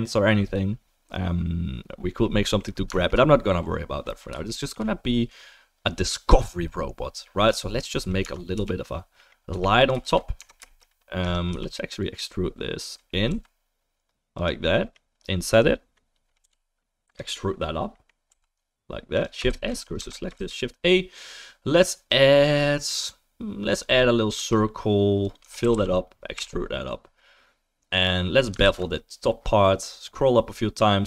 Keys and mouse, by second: 2.3-3.1 middle drag, 3.1-4.5 right drag, 4.5-9.5 shift+middle drag, 7.5 click, 8.2 Tab, 8.5 3, 9.5-11.2 drag, 9.5 1, 10.0 shift+s, 10.4 Tab, 11.2 Tab, 11.2 middle click, 11.5 3, 11.7-14.5 drag, 13.3 e, 14.5 middle click, 14.9-18.0 right drag, 17.1 i, 18.3-31.0 drag, 18.3 e, 19.5 shift+s, 20.0 Tab, 20.3 shift+a, 24.4 s, 25.4 Tab, 25.6 a, 25.7 f, 26.3 e, 28.6 ctrl+b.